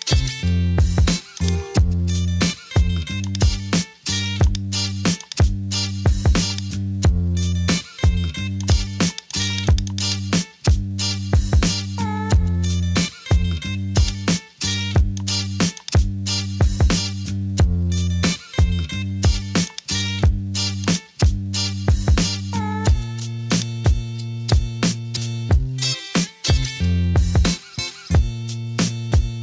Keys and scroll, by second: 11.8 super+d, 27.0-27.5 typing.